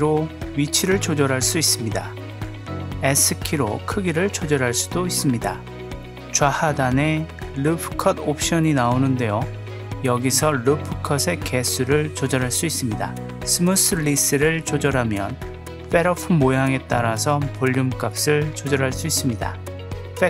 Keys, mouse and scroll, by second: 2.9 click, 3.3 s, 10.2-13.4 drag, 14.1-15.2 drag, 15.7-16.5 drag, 17.1-17.7 drag, 19.9-20.2 drag.